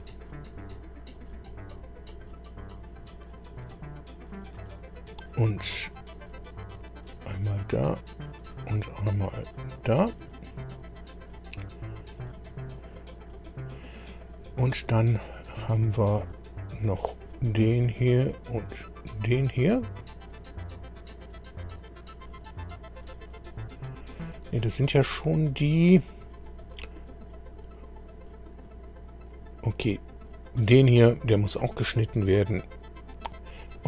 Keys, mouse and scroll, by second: 1.1 click, 3.5 scroll down 1, 4.4 click, 4.9-5.2 scroll down 1, 5.6 click, 7.0 click, 8.4 click, 9.4 click, 11.5-11.9 scroll down 1, 12.2 click, 12.7 click, 16.2 click, 18.2 click, 22.4 click, 25.4 scroll up 1, 26.6 click, 28.6 click, 30.4 click.